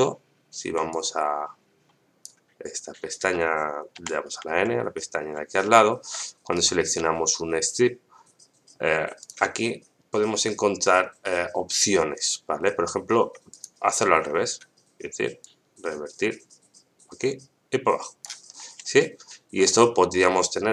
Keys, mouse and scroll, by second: 0.9-2.2 drag, 3.9 n, 5.6 shift+middle click, 6.5 right click, 9.2 click, 13.5 click, 15.4-18.2 drag, 18.9 shift+middle click.